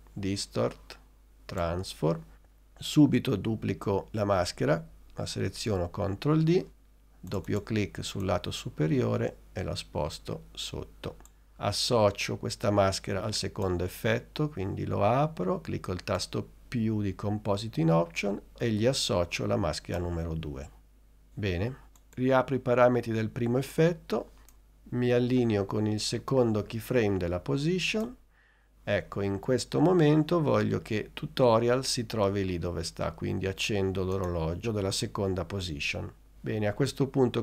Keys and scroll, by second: 5.6 super+d.